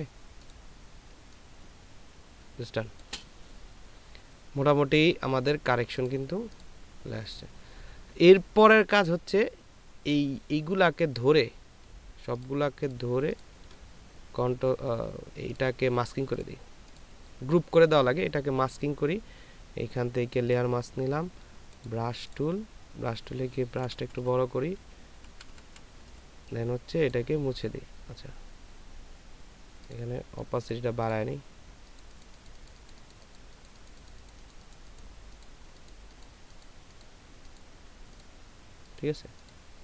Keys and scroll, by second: 1.5 ctrl+space, 24.2-26.1 typing.